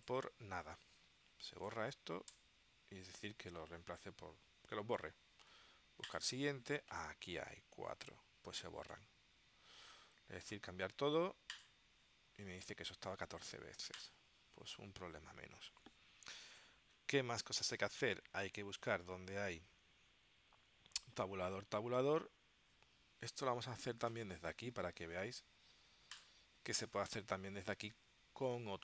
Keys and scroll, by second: 2.4 BackSpace.